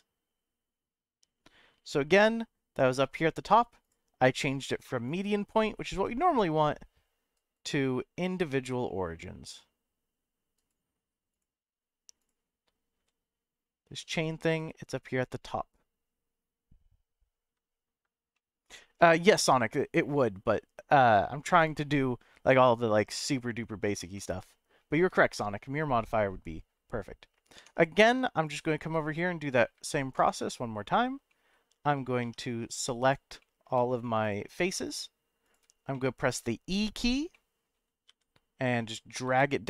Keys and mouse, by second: 4.0-5.2 drag, 5.9 s, 7.3 right click, 8.5 s, 10.5 right click, 11.3 click, 13.0 s, 14.6 right click, 18.3 shift+middle click, 24.1 middle click, 27.6 Tab, 28.5 click, 29.1 shift+middle click, 30.2 Tab, 31.3 middle click, 32.2 3, 33.4 middle click, 34.3 click, 35.9 middle click, 37.3 middle click, 38.1 e, 39.2 z.